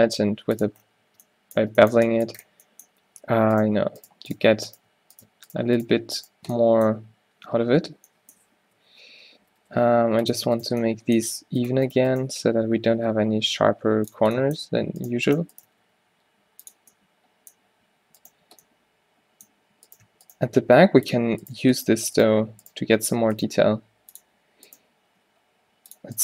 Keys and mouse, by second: 1.2 Tab, 1.9 Tab, 2.8-6.6 right drag, 6.6-8.1 middle drag, 8.9 o, 9.6 g, 12.4 shift+g, 15.7 g, 20.5-26.2 drag, 20.5 g, 23.5 g, 25.1 g.